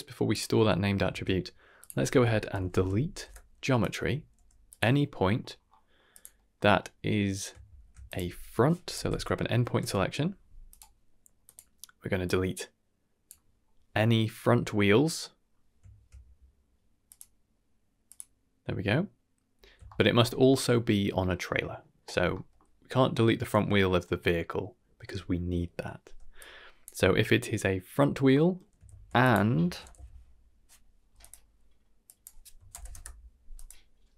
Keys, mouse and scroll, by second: 0.3 click, 1.0 shift+a, 2.7 e, 5.2-5.6 scroll up 2, 5.6 scroll down 1, 5.7 middle click, 6.1 click, 6.3 middle click, 7.6 shift+a, 11.4 click, 12.2-13.2 drag, 17.0 click, 18.0 click, 19.8 shift+middle drag, 22.3 middle drag, 26.3-26.9 drag, 28.3 middle click, 28.9 shift+a, 32.0-33.6 drag.